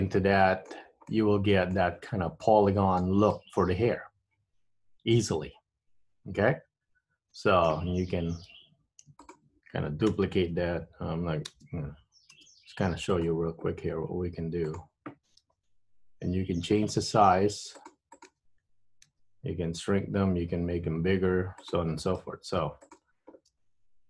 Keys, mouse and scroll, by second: 1.3 middle click, 2.6 middle click, 3.4 middle click, 8.8 Tab, 9.3 shift+click, 10.2 KP_1, 11.6 shift+d, 14.1 r, 15.5 g, 18.2 click, 19.2 s, 22.3 r, 23.6 g.